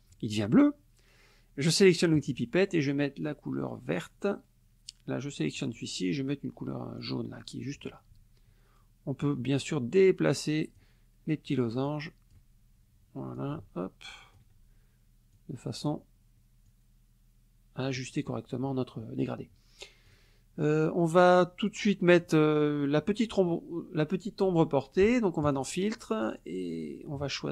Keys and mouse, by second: 2.2 click, 3.9 click, 5.6 click, 7.0 click, 9.2-11.0 drag, 11.8 click, 13.3-14.5 ctrl+drag, 15.3 click, 16.7-18.1 drag, 20.1 click, 25.5 click.